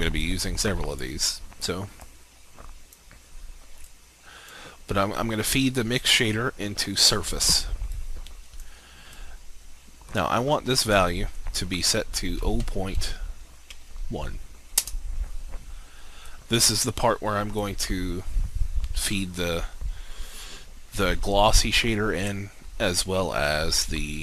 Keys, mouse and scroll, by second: 1.5-11.9 drag, 12.4 0, 13.7 1, 14.7 Return, 16.3-18.0 drag.